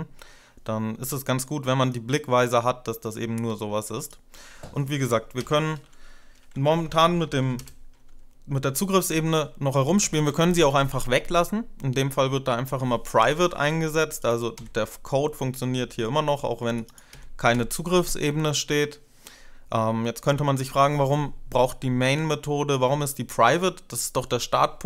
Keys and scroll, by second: 5.3 Return, 6.0-7.9 typing, 9.8 ctrl+BackSpace, 14.4 Delete, 15.6 Delete, 16.9 Delete, 17.3 Delete.